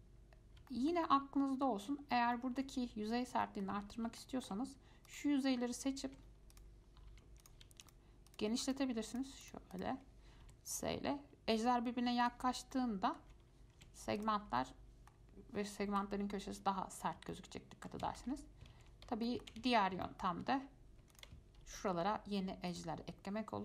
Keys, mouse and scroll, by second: 0.9-2.1 shift+middle drag, 2.1-2.5 scroll down 1, 2.5-4.1 shift+middle drag, 4.1-4.4 scroll up 2, 4.4 shift+middle click, 5.3 click, 6.2 Tab, 6.7 click, 7.3 3, 7.6 click, 8.0 shift+click, 8.5 shift+click, 8.8 shift+click, 9.3 shift+click, 9.6 shift+click, 9.9 shift+click, 10.6 s, 12.8 shift+scroll down 1, 12.9-14.0 shift+middle drag, 14.0 Tab, 14.4 click, 14.7 scroll down 1, 14.8-16.1 middle drag, 16.1 F5, 17.5 shift+middle click, 18.4 ctrl+z, 18.6-19.0 scroll up 2, 19.0 ctrl+z, 19.5 shift+middle click, 19.8 ctrl+z, 20.2-21.3 shift+middle drag, 21.3 click, 21.8 ctrl+r.